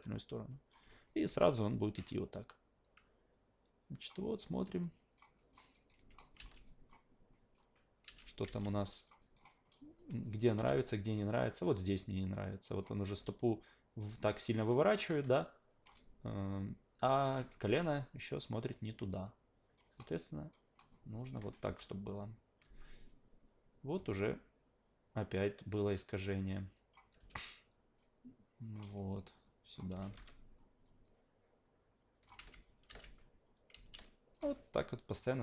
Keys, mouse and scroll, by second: 0.2-0.7 drag, 1.0 alt+middle drag, 1.3 alt+v, 1.6-4.0 alt+drag, 4.8 alt+click, 5.4 alt+click, 5.7 alt+right click, 6.2 alt+middle drag, 6.4 alt+v, 6.6 alt+drag, 7.3 alt+middle drag, 8.0 alt+v, 8.4 alt+v, 8.6-9.0 alt+drag, 9.2 alt+right drag, 9.4 alt+middle drag, 10.0 alt+click, 10.3 alt+right drag, 10.6 q, 11.2 click, 12.3 click, 13.2 w, 14.1 alt+click, 15.4 click, 16.0-17.2 alt+drag, 17.4 ctrl+z, 17.9-19.8 drag, 20.0-20.5 alt+drag, 20.7 alt+middle drag, 21.2 alt+click, 21.6 s, 22.1-26.9 drag, 27.2 w, 28.0-28.7 drag, 29.4 click, 29.9 s, 30.1 s, 30.8-32.2 drag, 32.4 v, 32.9 alt+v, 33.7 alt+v, 34.3 click, 34.6-35.1 alt+drag, 35.3 alt+middle drag.